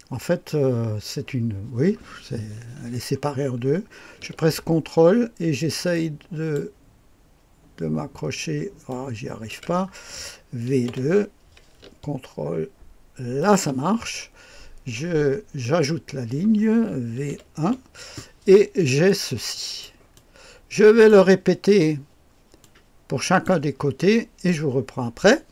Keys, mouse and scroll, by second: 5.9 ctrl+click, 7.0 ctrl+click, 8.8-9.9 ctrl+drag, 10.6 v, 10.8 KP_2, 13.4 ctrl+click, 15.6 click, 17.1 v, 17.2 KP_1, 19.0-20.1 drag, 21.0 click, 23.4 click, 24.4 click.